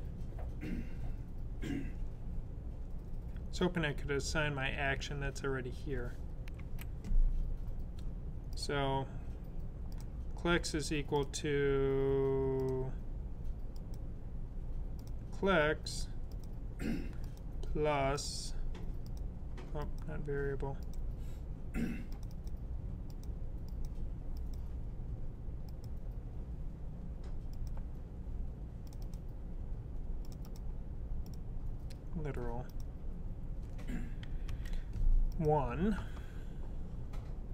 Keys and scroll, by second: 34.3 1, 36.5 typing.